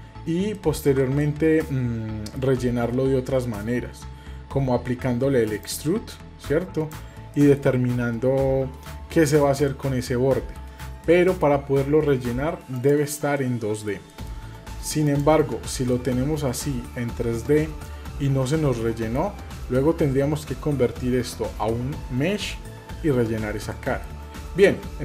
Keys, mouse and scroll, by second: 0.5-1.0 shift+middle drag, 1.2-2.3 middle drag, 4.2-5.6 scroll down 1, 5.6-6.9 drag, 9.7 middle click, 11.0 shift+middle click, 12.8 click, 13.3-14.4 middle drag, 15.1 click, 15.9-17.8 middle drag, 19.0 middle click, 23.7 middle click.